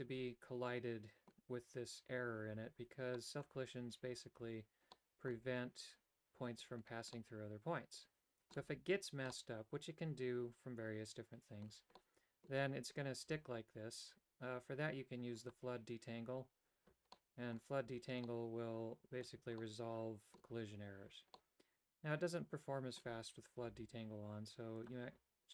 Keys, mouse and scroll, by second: 3.3 middle click, 5.0 middle click, 7.2-8.6 middle drag, 9.4-11.8 middle drag, 12.1 middle click, 15.6 click, 17.3 middle click, 18.4-19.4 middle drag, 19.7 middle click, 21.5-23.1 middle drag, 24.9 click.